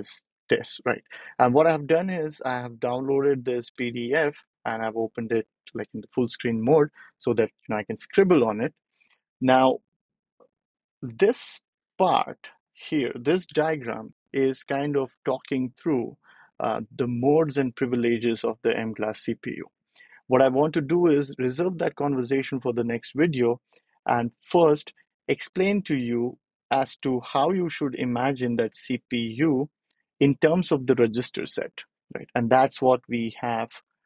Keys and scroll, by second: 8.5 ctrl+alt+super+p.